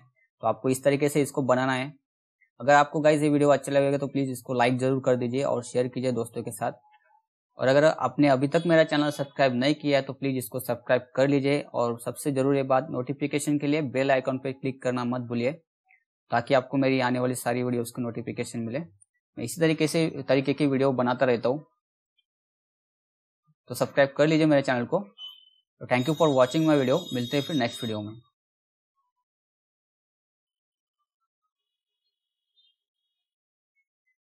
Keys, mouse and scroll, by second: 30.1 click.